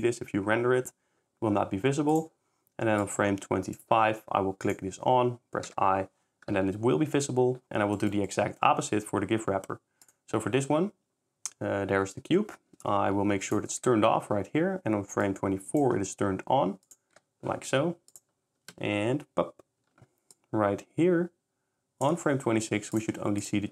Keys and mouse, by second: 3.0 click, 4.6 click, 8.3 middle click, 13.5 click, 15.2 click, 16.8 click, 17.2 i, 18.1-18.6 drag, 20.3 shift+click, 23.0-23.7 drag.